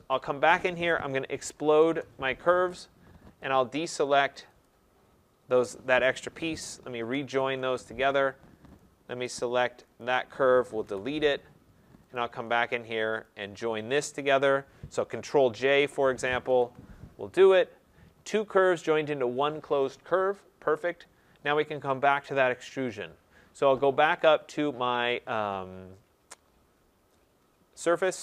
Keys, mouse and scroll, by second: 0.8-1.8 typing, 3.5 ctrl+click, 4.6 ctrl+click, 7.1 Return, 10.8 Delete, 12.1 click, 13.2 shift+click, 16.4 ctrl+j, 21.0 middle click, 21.4 middle click, 28.0 click.